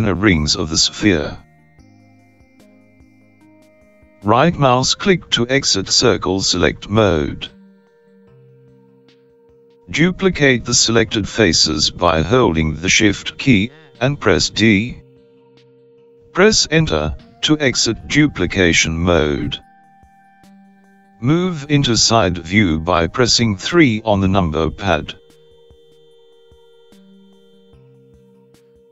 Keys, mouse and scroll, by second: 15.8 shift+d, 18.7 Return, 24.4 KP_3.